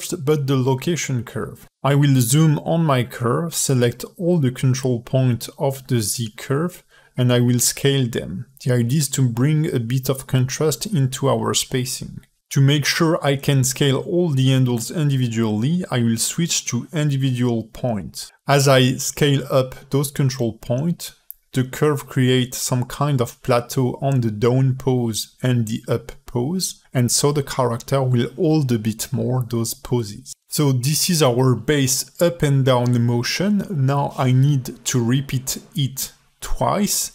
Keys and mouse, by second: 1.4 click, 1.4 a, 1.5 KP_Decimal, 1.9 a, 2.6 alt+shift+middle click, 3.0 ctrl+alt+middle click, 4.0 ctrl+alt+middle click, 5.0 alt+shift+middle click, 5.4 ctrl+alt+middle click, 6.9 click, 7.3 space, 8.1 space, 8.2-9.0 drag, 9.3 click, 10.0 s, 11.9-12.5 drag, 12.8 s, 14.8-17.8 drag, 18.2 s, 20.0 click, 20.3 space, 22.1 space, 22.6 s, 23.5 space, 25.1 space, 25.8 alt+shift+middle click, 26.1-26.6 drag, 27.3-30.7 drag, 31.7 ctrl+End, 33.9-34.6 drag, 35.8-36.5 drag, 36.9 alt+h.